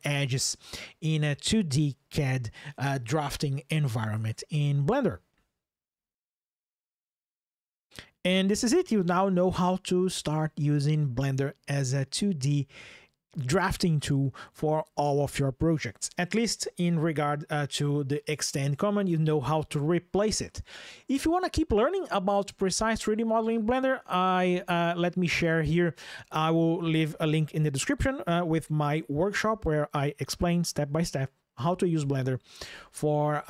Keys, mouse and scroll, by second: 0.0 ctrl+shift+\.